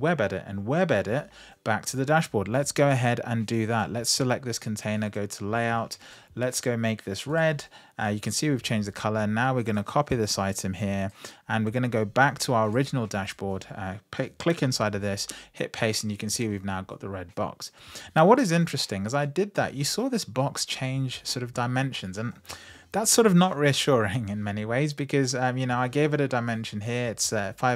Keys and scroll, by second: 14.7 super+v.